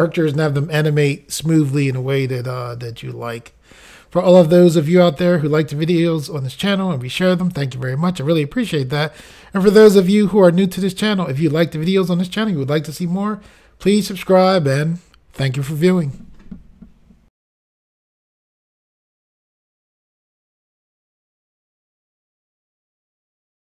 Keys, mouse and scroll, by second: 17.4 Insert.